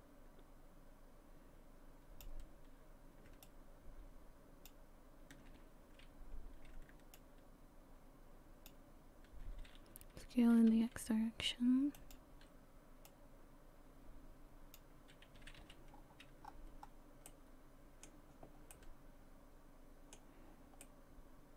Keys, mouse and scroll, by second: 3.4 shift+click, 7.1 shift+click, 10.2 s, 13.1 click, 15.4 a, 15.6 a, 15.9 scroll down 4, 16.5-17.3 scroll up 3, 17.3 middle click, 18.7 middle click, 20.8 middle click.